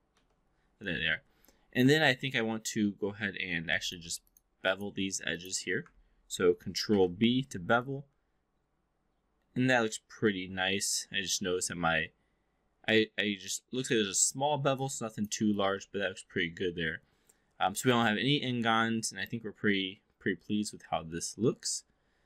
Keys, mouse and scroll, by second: 0.0 w, 3.3 2, 3.7 click, 4.3 shift+click, 5.3 shift+click, 6.7 ctrl+b, 7.6 click, 15.5-22.2 alt+drag.